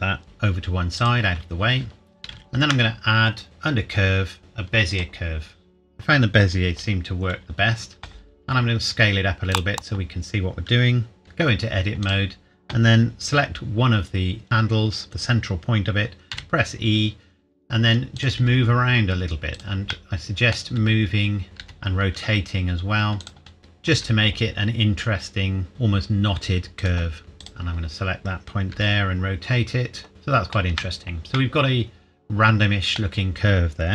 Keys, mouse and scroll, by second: 0.2 g, 1.0 click, 2.3 shift+a, 4.9 click, 8.4 s, 9.5 click, 11.2 Tab, 12.0 click, 13.4-13.8 scroll up 1, 14.4 scroll down 1, 16.3 e, 18.2 click, 18.4 e, 19.6 click, 19.9 middle click, 20.8 e, 21.4 click, 21.6 r, 23.2 click, 23.6 middle click, 24.0 e, 25.7 r, 26.8 click, 27.2 middle click, 27.4 click, 28.7 r, 30.1-30.7 scroll up 1, 30.7 Tab, 31.4 middle click, 31.6 middle click.